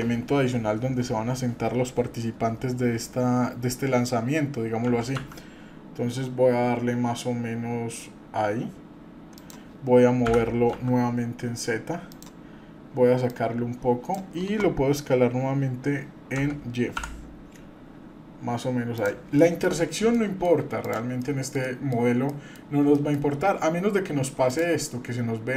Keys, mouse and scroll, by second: 4.9 s, 10.3 g, 13.3 click, 16.4 s, 19.4 middle click, 20.1-20.4 middle drag, 20.8 drag, 21.2 middle click, 21.6 middle click, 22.0 scroll down 1, 22.3 middle click, 22.6 scroll up 1, 22.9-23.3 shift+middle drag, 23.4 scroll up 1, 24.4 drag.